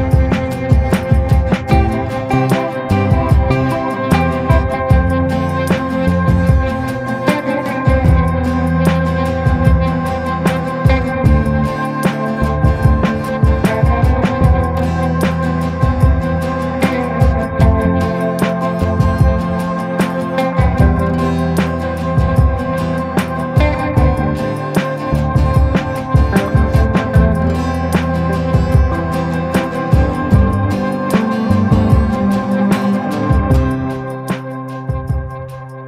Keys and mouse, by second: 4.3 ], 5.2 click, 5.4 click, 5.7 click, 6.2 click, 6.4 click, 7.5 click, 7.9 click, 8.5 click, 8.9 click, 9.3 click, 9.6 click, 9.9 click, 10.1 click, 11.1 click, 11.6 ctrl+z, 11.8 click, 12.6 click, 13.0 ctrl+z, 13.3 click, 13.9 ctrl+z, 14.2 click, 14.6 click, 15.9 ctrl+z, 16.6 ctrl+z, 16.6 ctrl+z, 17.1 ], 17.2 ], 17.3 ], 17.5 click, 18.5 click, 19.4 [, 19.6 click, 20.0 ctrl+z, 20.2-22.2 drag, 22.8-23.9 drag, 24.3-25.6 right drag, 26.3 right click, 26.5 right click, 26.8 right click, 27.1 right click, 27.4 click, 28.2 ctrl+z, 28.5 click, 28.7 click, 29.5 click, 29.9 click, 31.5-32.7 middle drag, 32.9 middle click, 33.3 shift+middle click, 35.0 click, 35.2 click.